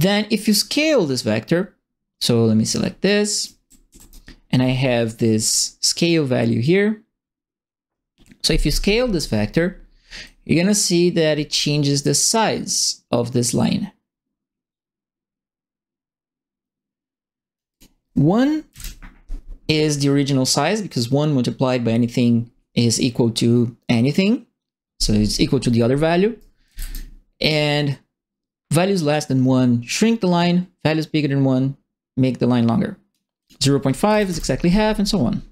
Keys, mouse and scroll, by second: 2.6 click, 3.0-4.1 right drag, 3.4 w, 3.8 w, 10.2-17.5 drag, 17.7 click, 18.6 KP_1, 26.3 right click, 26.4-27.1 typing, 28.7-33.1 drag, 33.4 click, 34.0 KP_Decimal, 34.2 KP_Enter.